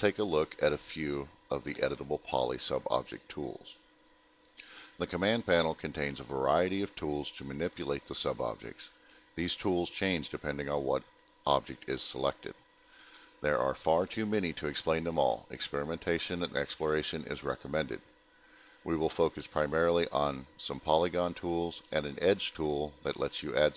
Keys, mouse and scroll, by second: 0.2 ctrl+click, 0.7 ctrl+click, 1.2 middle click, 1.9 middle click, 2.9 middle click, 4.1 alt+middle click, 4.3 middle click, 4.8 scroll down 1, 5.1 scroll, 5.2 scroll down 1, 5.2 alt+middle click.